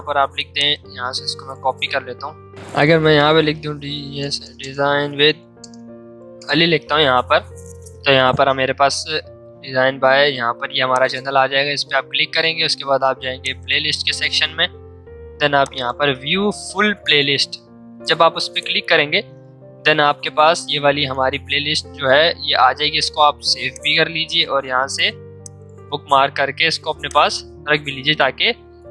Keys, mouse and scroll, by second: 3.2-5.8 typing, 6.2 Return, 9.0 scroll down 1, 10.9 click, 12.2 scroll down 1, 12.7 scroll up 1, 13.4 click, 14.5-15.6 scroll down 1, 15.6 click, 20.3 scroll down 1, 22.4 scroll up 1, 23.7 click, 27.6 scroll up 1.